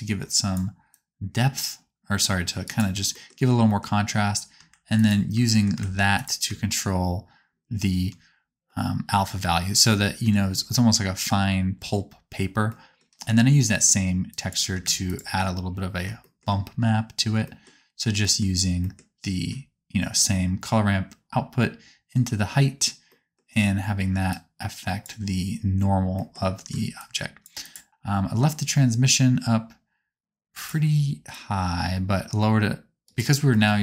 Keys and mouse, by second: 4.9 ctrl+shift+click, 6.1 ctrl+shift+click, 14.2 click, 24.2-27.6 drag, 27.9-30.7 drag, 30.7 middle click, 31.2-33.1 ctrl+drag, 33.1-33.8 ctrl+middle drag.